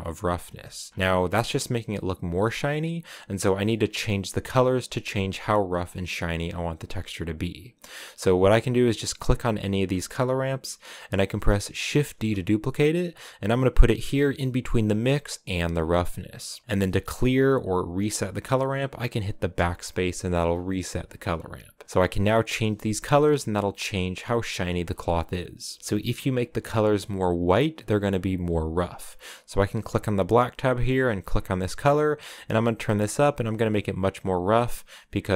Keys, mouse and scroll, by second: 0.6 shift+middle click, 0.9-1.2 scroll up 5, 8.4-9.0 scroll up 1, 9.0-11.7 drag, 11.7 shift+d, 15.6 click, 16.7 click, 19.3 BackSpace, 21.2 scroll up 2, 22.1-22.7 scroll up 2, 22.7 shift+middle click, 23.2-24.7 scroll up 1, 26.5-27.1 scroll up 1, 29.7-31.7 drag.